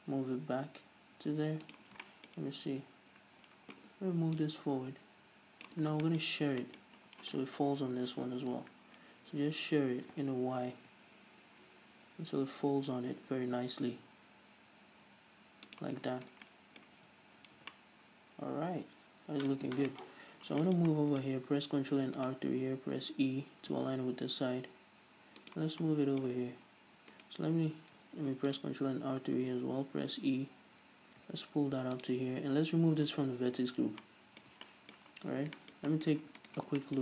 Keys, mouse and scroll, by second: 2.2 shift+click, 2.5-4.8 shift+middle drag, 3.4-4.8 scroll down 2, 4.8-6.5 drag, 6.3 scroll down 1, 6.5-16.3 shift+middle drag, 6.8 scroll up 1, 7.3 scroll up 1, 8.4 ctrl+alt+shift+s, 16.3 shift+click, 16.5-16.8 scroll down 1, 16.9-26.0 middle drag, 17.4 z, 17.8 scroll up 2, 18.1 Tab, 20.1 Tab, 20.6-21.1 scroll up 2, 21.7-22.4 scroll up 2, 22.4 ctrl+r, 26.0 shift+click, 26.3-27.6 middle drag, 27.6 alt+right click, 28.7 ctrl+r, 32.5 shift+click, 33.6 click, 34.2 scroll down 2, 34.5-36.9 middle drag, 35.6-36.1 scroll down 2, 36.7 Tab, 36.9 right click.